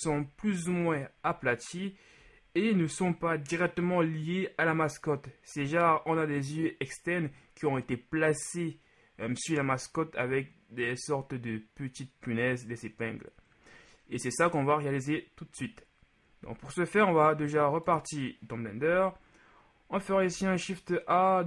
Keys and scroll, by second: 20.3 shift+a.